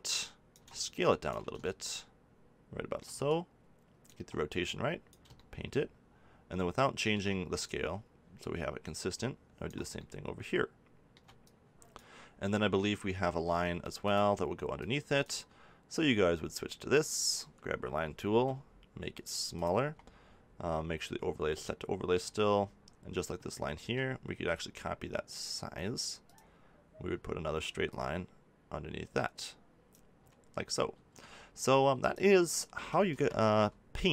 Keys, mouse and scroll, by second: 4.4 middle click, 5.0 click, 5.4 middle click, 6.1 middle click, 7.6-9.6 right drag, 9.9-11.4 middle drag, 13.0-18.2 drag, 18.2 f, 19.6-21.4 drag, 23.7 f, 26.3-27.3 drag, 30.9 ctrl+z, 32.0-33.9 drag.